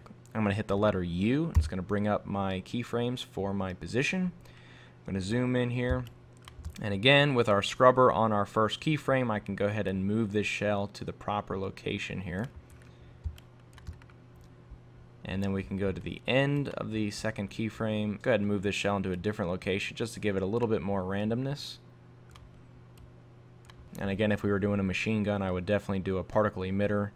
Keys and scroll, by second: 18.2 super+z.